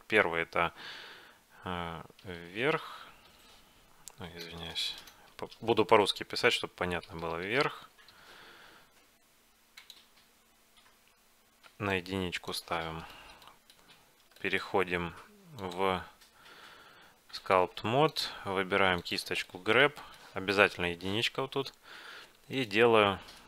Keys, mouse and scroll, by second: 2.4 d, 4.6 BackSpace, 4.8 BackSpace, 5.1 BackSpace, 7.3 d, 12.0-14.1 drag, 13.0-15.4 middle drag, 13.2 right click, 15.7-17.4 drag, 18.1-20.0 drag, 19.5-21.6 middle drag, 19.5 right click, 22.4 f.